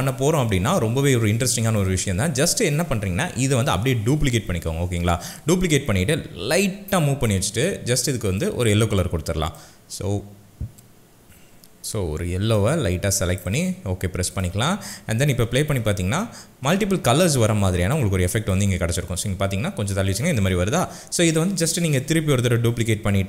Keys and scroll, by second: 0.6 s, 0.7 s, 4.0 ctrl+d, 15.5 space, 22.0 ctrl+d.